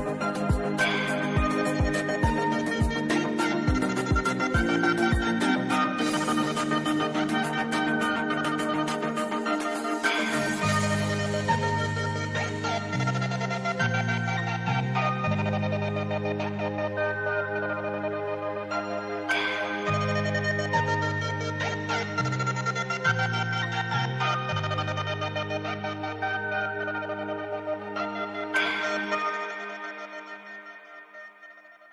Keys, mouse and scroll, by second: 1.2 i, 1.8 click, 4.1 v, 4.4-13.0 drag, 14.3 alt+scroll up 1, 14.4 alt+scroll down 1, 14.9 alt+scroll down 1, 15.3 space, 15.4 click, 15.5 space, 16.9 scroll up 1, 19.6 click, 19.9 scroll up 1, 22.9 right click, 24.1-27.6 drag, 27.6 v, 27.8-30.2 drag, 30.2 scroll down 1, 30.8 alt+scroll down 1, 31.7 alt+scroll up 1.